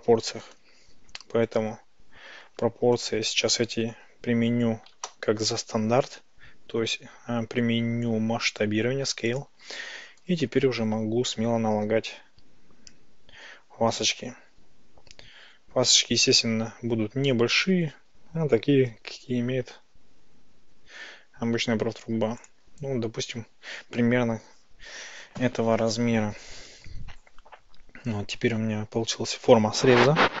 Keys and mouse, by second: 4.2 Tab, 4.9 ctrl+a, 10.3 Tab, 11.1 ctrl+shift+b, 22.5 click, 26.5 Tab.